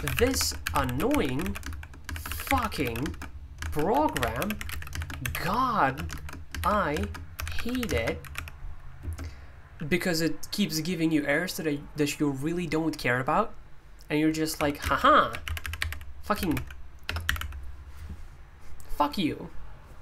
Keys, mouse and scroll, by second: 0.0-9.0 typing, 14.5-17.3 typing.